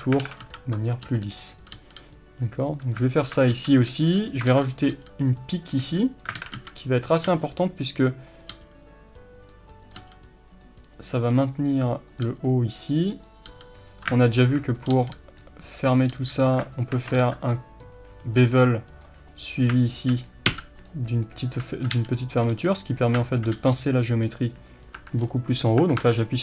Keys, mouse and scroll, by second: 0.2 alt+a, 0.9 b, 1.8 g, 3.2 alt+a, 3.8 b, 4.5 ctrl+r, 4.9 click, 4.9 g, 5.8 r, 6.4 alt+a, 6.8 b, 7.1 click, 7.3 g, 8.4 click, 8.5 g, 9.5 click, 10.0 g, 10.7 click, 11.2 g, 11.9 click, 12.2 g, 13.2 click, 13.5 g, 13.9 click, 14.4 alt+click, 14.9 g, 15.7 click, 16.1 g, 16.5 click, 17.2 ctrl+b, 19.0 click, 20.5 f, 20.9 click, 22.0 g, 22.3 click, 22.5 r, 22.8 click, 23.6 g, 25.0 Tab, 25.2 scroll down 1, 25.8 Tab.